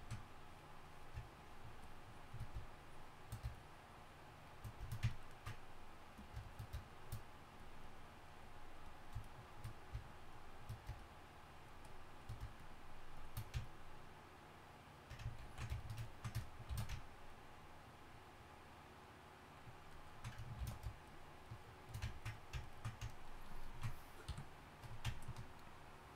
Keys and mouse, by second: 15.5 ctrl+z, 16.7 shift+s, 20.0 middle drag, 20.1 middle drag, 20.6 shift+s, 22.1-23.3 middle drag, 24.3 KP_3.